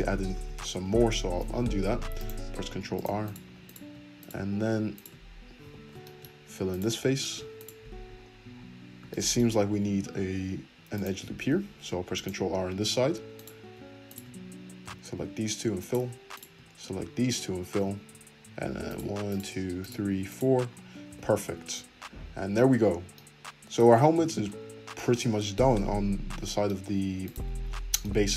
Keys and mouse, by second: 0.3 ctrl+z, 0.7 ctrl+z, 0.9 middle click, 1.7 ctrl+r, 3.2 click, 3.6 shift+click, 4.2 click, 4.9 shift+click, 5.6 f, 5.9 shift+middle click, 6.7 click, 6.7 shift+middle click, 7.5 shift+click, 7.6-13.4 shift+middle drag, 10.0 ctrl+r, 13.4 click, 13.4 shift+middle click, 14.1 shift+click, 14.2-15.8 middle drag, 14.8 f, 15.8 shift+click, 16.4-18.9 shift+middle drag, 17.7 f, 18.9 click, 18.9 shift+middle click, 19.3 shift+click, 19.8 shift+click, 20.3 shift+click, 21.0 f, 21.4 Tab, 22.6 `, 23.8 `, 26.7 `, 27.2 click, 27.4 Tab, 27.4-28.3 middle drag.